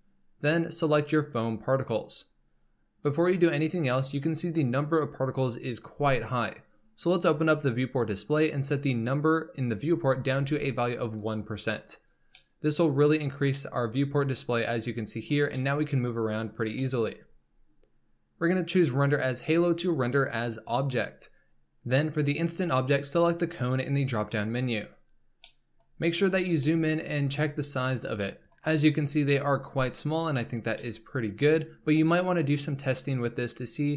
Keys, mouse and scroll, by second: 2.4-3.7 drag, 5.7-6.2 drag, 7.4-11.8 drag, 12.3-16.3 middle drag, 16.3-16.7 scroll up 1, 16.7-18.9 shift+middle drag, 18.9-25.5 drag, 25.5 middle drag, 25.8-26.6 scroll up 4, 26.6-27.1 shift+middle drag, 27.1-27.8 scroll up 2, 27.8-28.2 scroll down 1, 28.2-30.3 shift+middle drag, 30.3-30.7 scroll down 1, 30.7-31.8 middle drag, 31.8-33.9 scroll down 2.